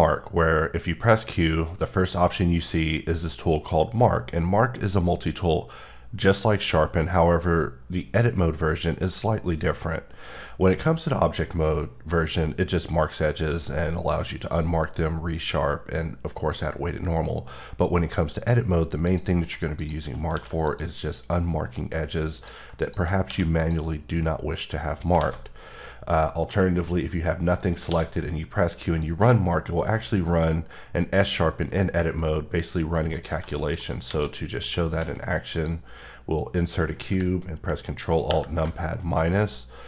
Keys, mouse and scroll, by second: 18.3 click, 19.0 click, 19.7 click, 20.7 click, 22.3 click, 22.8 click, 23.6 click, 29.0 click, 33.1 middle click, 33.8 right click, 34.6 click, 35.5 click, 39.4 middle click.